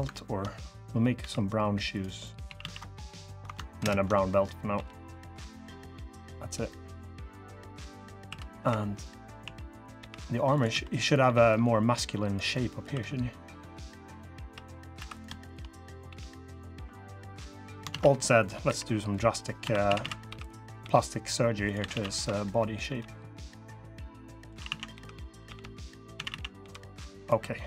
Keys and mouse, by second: 0.9 ctrl+KP_Add, 0.9 g, 2.0 click, 2.2 a, 2.3 a, 3.6 ctrl+KP_Add, 4.5 g, 5.8 drag, 6.4 click, 6.9 drag, 7.4-7.8 drag, 8.0-11.0 typing, 8.8 click, 12.3 click, 12.6 2, 14.1 3, 14.7 3, 15.5 click, 15.8 g, 17.7 alt+z, 18.4-22.6 typing, 24.3-26.3 typing.